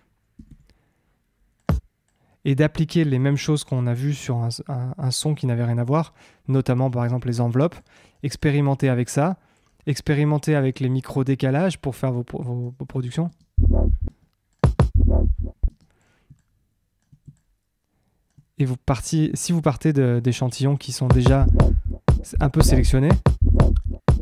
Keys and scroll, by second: 13.2 space, 21.0 space.